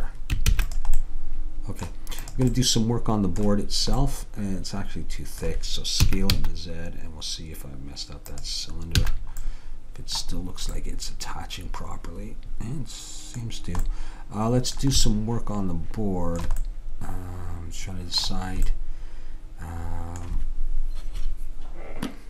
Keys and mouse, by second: 0.6 ctrl+s, 2.3-4.3 drag, 6.1 s, 9.1 a, 12.8-14.1 middle drag, 16.9-18.1 middle drag.